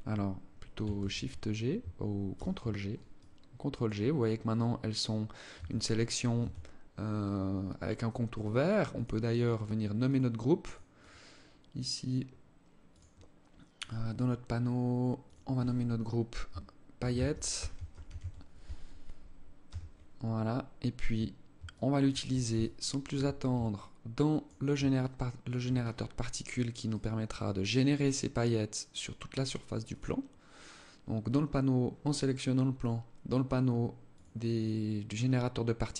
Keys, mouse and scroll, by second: 0.5 shift+g, 1.9 ctrl+g, 2.7 alt+click, 5.1 Tab, 5.9 Tab, 8.4 click, 8.8 click, 9.6 click, 10.2 click, 10.5 click, 11.0 scroll down 2, 11.2-11.9 scroll up 8, 12.4 click, 13.3 click, 14.8 click, 22.2 alt+shift+click, 23.3 alt+click, 24.6 alt+shift+click, 25.4 scroll up 3, 25.6-26.1 scroll down 2, 26.4 right click, 29.4 click, 33.6 click.